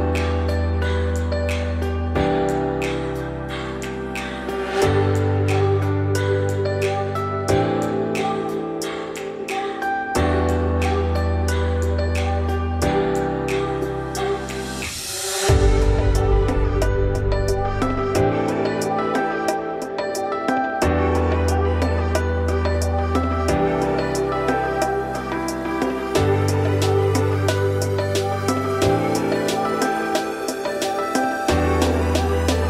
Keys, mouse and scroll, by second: 0.7-1.2 scroll up 2, 1.2 s, 4.0 ctrl+z, 4.9-5.4 scroll down 2, 5.4 a, 6.2 alt+e, 7.9 s, 9.1 ., 10.6 s, 14.3-15.0 scroll up 2, 15.0 click, 16.1 s, 18.8-19.5 scroll up 4, 19.5 s, 21.3 ., 22.9 s, 24.4-25.4 scroll down 7, 25.4 a, 25.9 scroll down 3, 26.1 middle click, 26.5 z, 26.9 middle click, 27.2-27.8 scroll up 2, 27.8 e, 29.6 scroll up 2, 29.9 middle click, 30.4 Tab, 30.6 scroll down 2, 30.8-31.6 middle drag, 31.6 ctrl+s, 32.0-32.6 right drag.